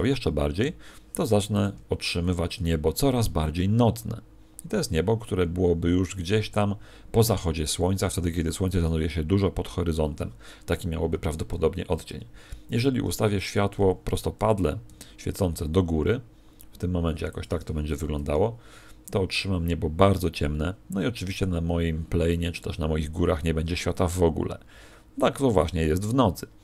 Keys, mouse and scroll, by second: 0.5 r, 1.6 click, 11.4 Escape, 17.4 click.